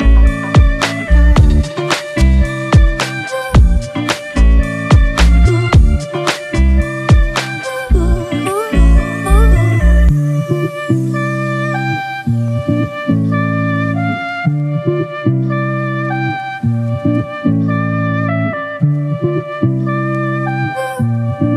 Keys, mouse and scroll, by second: 2.5 alt+shift+click, 6.4 Return, 10.4-10.9 typing, 12.9 double click, 16.7 double click.